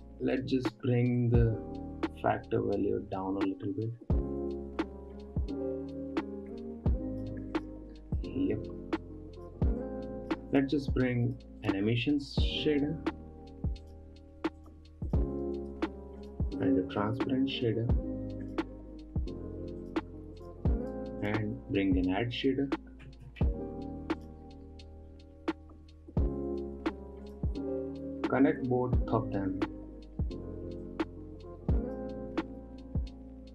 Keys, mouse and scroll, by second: 0.6-1.6 middle drag, 1.6-4.7 drag, 8.1 click, 8.5 scroll down 1, 8.7-9.5 middle drag, 9.5-11.1 drag, 12.2 shift+a, 15.6 click, 16.1 shift+a, 20.9 click, 21.3 shift+a, 23.1 d, 29.0 click, 31.3-33.5 drag.